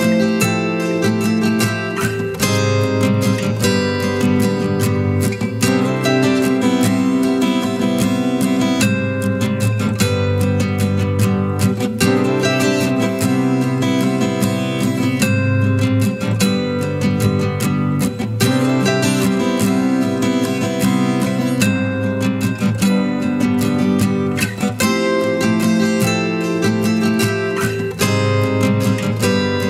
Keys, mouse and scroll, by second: 0.3 ctrl+t, 2.4 alt+shift+click, 7.1 alt+shift+click, 13.0 Return, 18.7-19.4 typing, 20.8 double click, 28.6 typing, 29.1 double click.